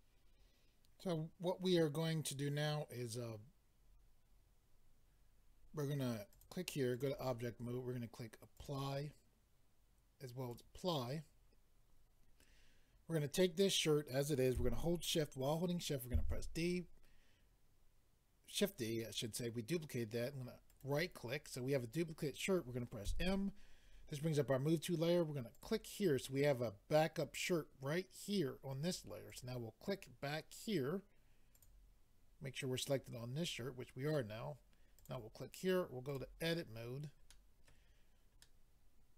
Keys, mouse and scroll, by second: 6.3 click, 6.9 click, 8.5 click, 10.5 click, 20.7 right click, 25.5 click, 29.3 click, 31.6 click, 35.0 click, 36.1 click, 36.7-37.3 scroll up 4, 37.3 middle click, 38.4 middle click.